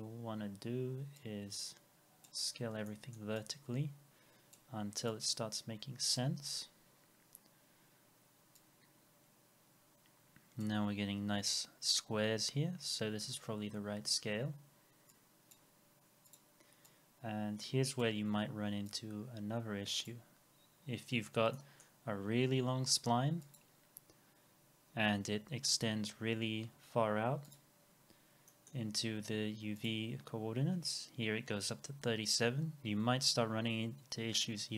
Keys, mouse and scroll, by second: 2.6 scroll down 1, 2.9 middle click, 6.5 scroll up 1, 12.9-15.2 scroll down 1, 21.5 middle click, 24.3 scroll down 1, 28.1 scroll down 1, 28.5 middle click, 30.8-31.1 scroll up 1.